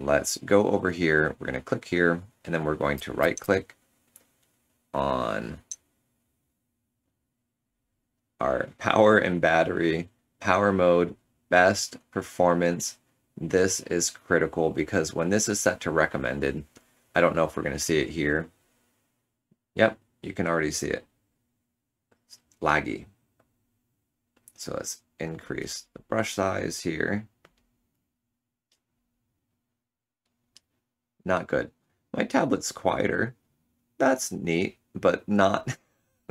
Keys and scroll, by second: 31.1 ctrl+z, 31.7 ctrl+z, 31.7 ctrl+z, 32.3 ctrl+z.